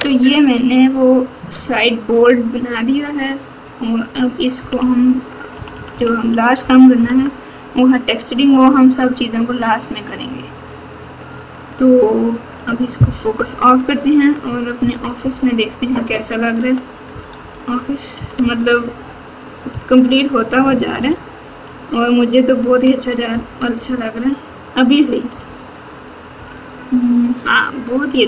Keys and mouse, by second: 4.5 KP_4, 5.5 KP_6, 5.7 KP_6, 6.9 KP_4, 6.9 KP_6, 7.1 KP_4, 13.3 KP_Divide, 14.7 KP_4, 15.0 KP_4, 15.2 KP_4, 16.0 KP_Subtract, 16.5 KP_Subtract, 16.6 KP_Subtract, 16.7 KP_Subtract, 17.1 KP_Subtract, 17.6 KP_Subtract, 18.1 KP_6, 18.4 KP_6, 19.6-22.8 ctrl+KP_6, 23.2 KP_4, 23.6 KP_4, 25.3 KP_Subtract, 26.3 KP_6.